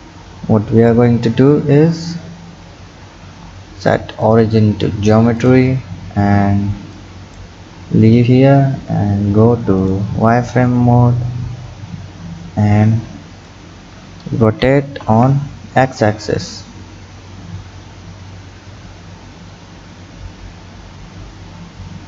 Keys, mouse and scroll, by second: 0.7 KP_3, 1.9-2.9 scroll up 5, 2.9-4.2 scroll down 1, 4.2-5.8 drag, 5.8-7.0 scroll down 3, 7.0 click, 7.7-9.8 scroll up 2, 9.8 click, 10.9-11.5 scroll up 1, 11.5-12.9 scroll up 2, 12.9-14.5 drag, 14.5 r.